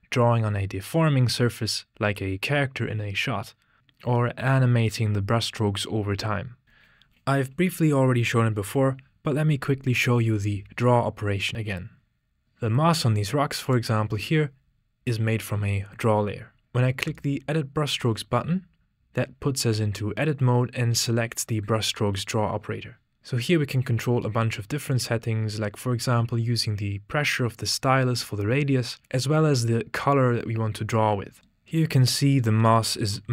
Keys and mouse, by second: 13.9-17.8 drag, 17.8 typing, 23.2-31.4 drag, 32.4 middle click.